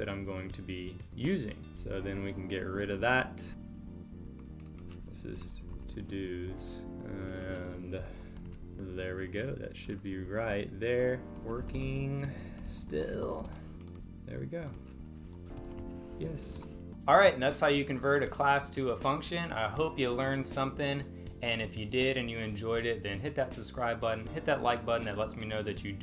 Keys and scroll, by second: 1.8 Delete, 3.5 super+s, 6.5 super+s, 8.0 Delete, 8.5 super+s, 12.2 space, 13.5 super+Return, 15.6 space.